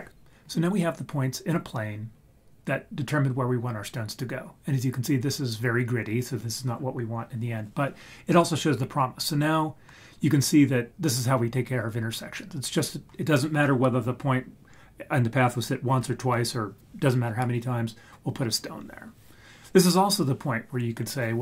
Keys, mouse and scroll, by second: 0.5-2.0 scroll up 1.